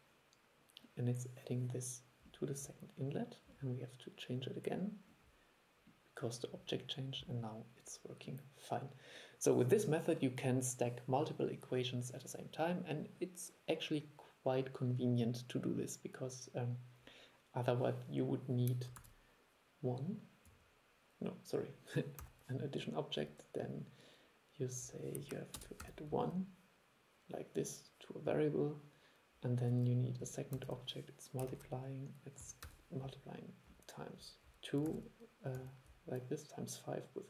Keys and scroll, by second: 19.1 super+1, 30.7 super+1, 35.0 super+2.